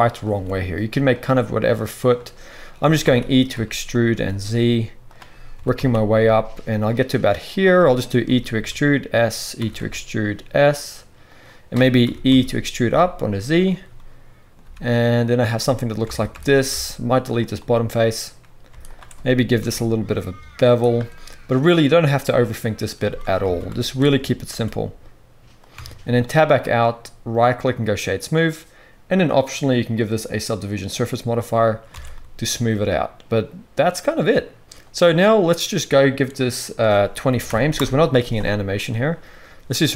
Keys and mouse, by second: 0.3 s, 2.8 e, 4.1 s, 5.5 e, 8.2 e, 9.5 e, 12.0 e, 14.6 x, 16.0 alt+a, 16.7-23.1 middle drag, 16.7 x, 19.6 ctrl+b, 23.4 alt+a, 23.8 alt+shift+click, 24.5 ctrl+b, 25.7 Tab, 26.6 middle click, 27.3-32.7 drag, 30.0-32.7 middle drag, 30.0-32.7 right drag, 32.0 alt+a, 39.9 space.